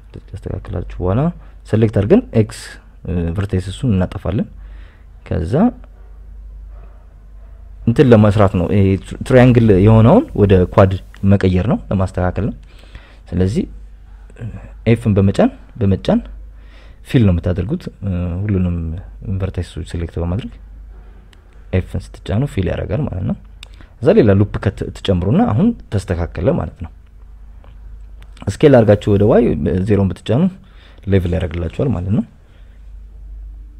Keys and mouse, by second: 0.3 right click, 0.7 g, 1.3 click, 1.6 right click, 2.0 g, 2.8 click, 4.2 right click, 5.5 x, 6.9 right click, 7.3 shift+right click, 8.2 shift+right click, 8.6 shift+right click, 9.3 f, 10.1 right click, 10.5 g, 10.6 g, 11.4 click, 12.6 f, 14.3 right click, 14.6 shift+right click, 15.1 right click, 17.1 w, 18.4 right click, 18.8 g, 20.3 right click, 20.6 g, 21.4 click, 22.7 f, 23.4 ctrl+z, 24.9 f, 26.8 ctrl+r, 28.0 Escape, 30.3 s, 31.3 y, 31.8 Escape, 32.6 right click, 33.3 right click, 33.6 shift+right click.